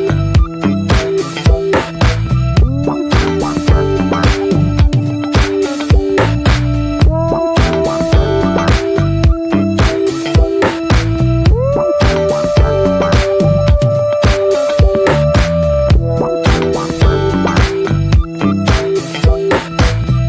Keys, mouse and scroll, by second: 1.8-3.1 shift+middle drag, 3.1 ctrl+r, 5.6 click, 6.1 ctrl+r, 8.7 scroll down 3, 8.9-9.2 middle drag, 9.2 Tab, 9.5 middle click, 9.7 scroll up 1, 10.0-10.5 middle drag, 10.5 ctrl+1, 10.6 ctrl+2, 10.9 scroll down 1, 11.1-13.6 middle drag, 13.6 Tab, 13.8-14.1 scroll up 1, 14.1-15.3 middle drag, 15.3 drag, 15.5 shift+middle click, 15.8-16.8 scroll up 2, 16.8 ctrl+r, 18.1-18.6 middle drag, 18.6 ctrl+r, 20.1 scroll down 1.